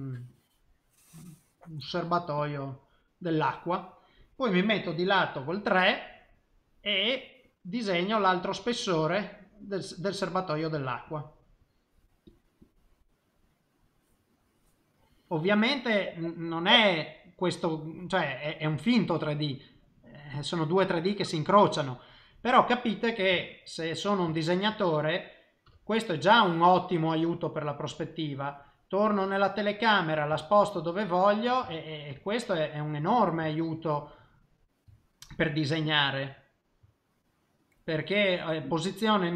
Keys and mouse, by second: 0.0 click, 0.3 click, 1.1 click, 2.0 click, 2.3 click, 2.5 click, 3.2 middle click, 5.5 KP_3, 7.0 click, 7.5 click, 7.9 click, 8.4 click, 8.8 click, 9.1 click, 10.0 click, 10.7 click, 11.0 click, 11.6 click, 11.9 click, 12.2 click, 12.6 click, 13.2 middle click, 19.1 middle click, 23.4 shift+middle click, 23.8 middle click, 24.3 shift+middle click, 24.7 middle click, 25.6 KP_0, 28.8 middle click, 30.4 shift+middle click, 31.7 shift+middle click, 32.2 middle click, 33.5 shift+middle click, 33.8 middle click, 35.0 ctrl+middle click, 36.8 middle click, 37.7 middle click.